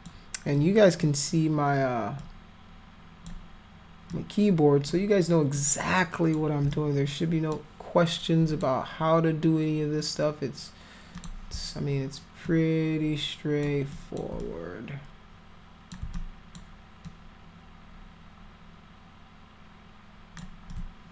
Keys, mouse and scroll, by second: 0.5 alt+click, 2.1-3.2 alt+drag, 4.1 alt+click, 5.5 alt+click, 6.7 click, 8.5 click, 11.1 click, 12.4-13.6 alt+drag, 13.9 alt+click, 14.4-15.9 drag, 16.1 alt+click, 17.0-20.3 alt+drag, 20.7-21.1 alt+drag.